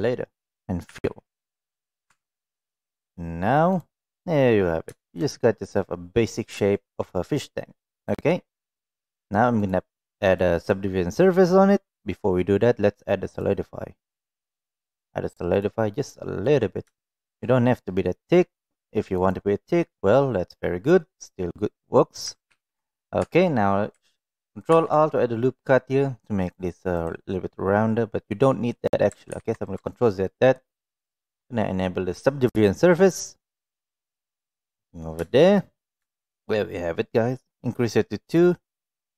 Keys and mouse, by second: 0.9 f, 1.8 click, 2.0 Tab, 2.2-2.5 middle drag, 3.7 click, 4.0 middle click, 4.8 shift+middle drag, 5.2-6.1 middle drag, 6.7 shift+middle drag, 7.1-7.4 middle drag, 8.1 click, 9.6 drag, 10.4-12.2 drag, 13.4-15.5 drag, 16.0 middle click, 16.9 shift+middle drag, 19.1 click, 22.4 ctrl+a, 23.1 Tab, 24.7 ctrl+r, 29.3 ctrl+z, 30.6-33.8 drag, 34.4 middle click, 35.3 shift+middle click, 36.0 shift+middle click, 36.5 middle click.